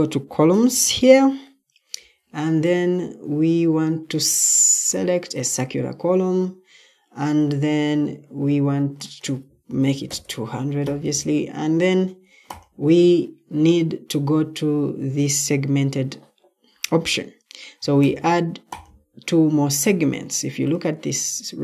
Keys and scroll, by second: 9.6-10.6 typing.